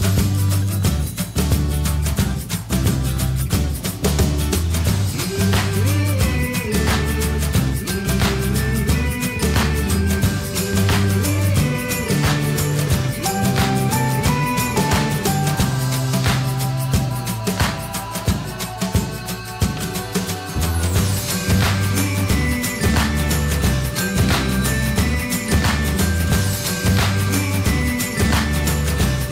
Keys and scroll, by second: 0.4 Return, 3.4 Return.